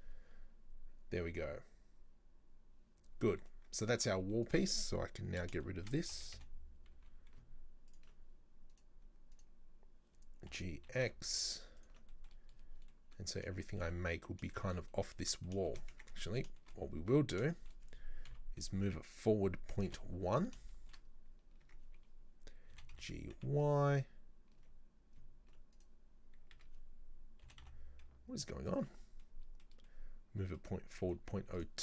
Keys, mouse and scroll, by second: 3.0 scroll down 2, 3.3 Tab, 3.5-4.5 middle drag, 4.5 right click, 5.2-5.7 scroll down 3, 5.7-6.1 shift+middle drag, 6.1 g, 8.7 right click, 9.4 right click, 10.5 g, 12.1-12.5 middle drag, 12.5-12.9 scroll up 2, 12.9-16.0 middle drag, 16.0 Tab, 16.2 middle click, 16.9 scroll up 2, 17.0 Tab, 17.6 shift+middle click, 18.3 KP_3, 20.4-20.7 scroll up 2, 20.7 shift+middle click, 21.1-21.7 scroll up 2, 21.7 Tab, 22.8 g, 26.6 a, 27.5 g, 29.1 scroll down 3, 29.2 scroll up 1, 29.3-30.8 middle drag, 30.8-31.1 scroll up 2, 31.1 z.